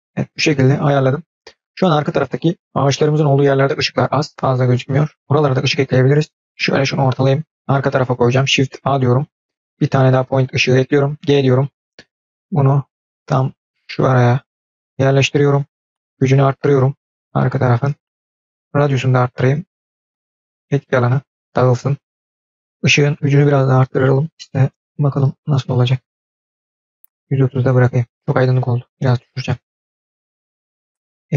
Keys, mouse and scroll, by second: 6.4-6.8 scroll down 4, 6.8-7.3 shift+middle drag, 8.7 shift+a, 11.0 g, 15.8-17.1 drag, 18.5-22.6 drag, 23.0-25.6 drag, 25.8 click, 26.8-28.1 drag, 28.6 click, 29.8 click, 30.5-31.3 drag.